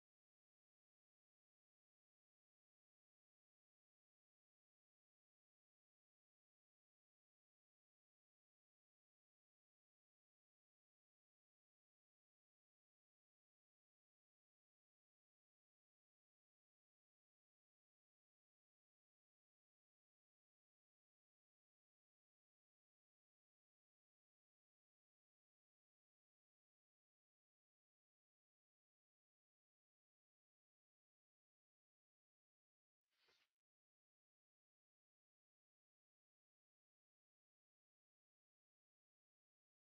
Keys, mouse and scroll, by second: 1.5 ctrl+z, 2.2 ctrl+d, 3.6 double click, 4.1 alt+click, 5.2-7.3 typing, 6.0 scroll up 1, 7.4 alt+middle click, 8.5 double click, 13.5 Return, 15.5 typing, 15.6 Return, 17.4 alt+middle click, 17.8 alt+click, 22.2 BackSpace, 23.5 alt+middle click, 25.5 double click, 26.0 alt+click, 27.7 BackSpace, 28.5 BackSpace, 28.5 alt+click, 29.6 BackSpace, 30.4 alt+click, 31.2 right click, 38.2 alt+click.